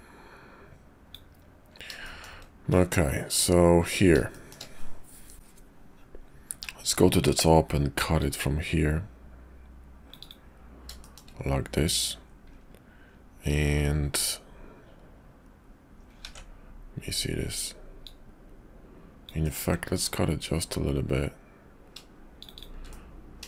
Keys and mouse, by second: 2.0 middle click, 4.3 shift+middle click, 8.2-10.4 drag, 11.0 shift+middle click, 16.3 ctrl+z, 17.9-22.5 drag, 19.4-22.5 middle drag, 22.9 middle click.